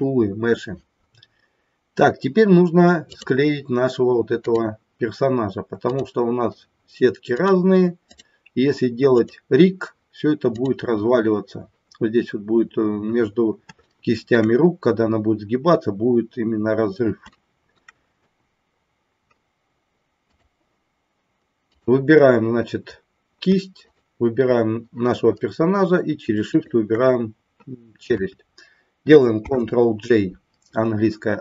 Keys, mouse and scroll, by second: 3.1 click, 4.5 click, 5.8 click, 8.1 click, 9.1 click, 10.6 click, 13.9 shift+middle click, 17.3 shift+middle click, 21.6 click, 23.7 shift+click, 26.5 shift+click, 29.6 ctrl+j.